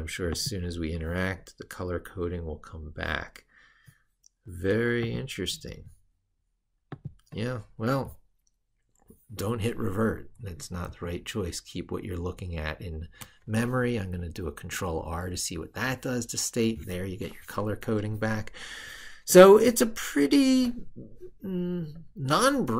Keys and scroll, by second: 10.7 ctrl+r.